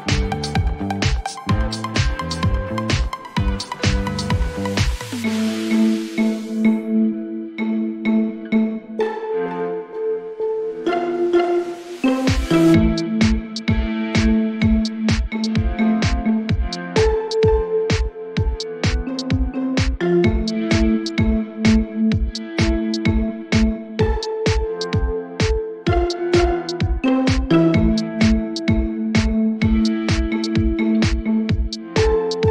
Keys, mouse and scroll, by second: 2.8-4.6 drag, 3.5-4.7 typing, 7.4 click, 7.5 click, 11.5 click, 12.9 click, 15.1 click, 15.7 typing, 16.3 Return, 17.6 click, 17.9 click, 18.1 typing, 18.5 Return, 18.5 click, 20.6 click, 22.3 click, 23.7 typing, 24.8 Return, 27.1 click, 29.1 click, 29.9 u, 31.3 click.